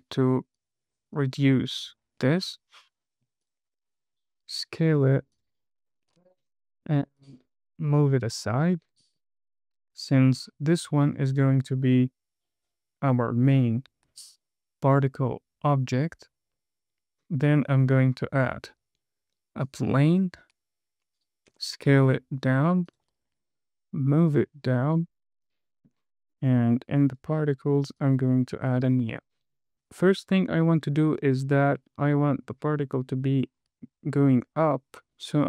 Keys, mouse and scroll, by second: 0.0 click, 0.5 click, 0.9 click, 1.5 click, 2.4-2.9 scroll down 1, 3.8 click, 4.1 s, 5.7 click, 7.5 click, 8.3 click, 9.3 click, 9.8-10.3 scroll up 2, 10.4 shift+middle click, 11.6 click, 18.3 shift+a, 21.1 scroll down 1, 21.9 s, 23.2 click, 23.6 scroll up 2, 24.3 click, 25.3 middle click, 27.5 click, 28.3 click, 29.7 scroll down 5, 30.4-31.0 scroll up 3, 31.5-31.8 scroll down 3, 33.4 space, 33.9-34.6 scroll down 3.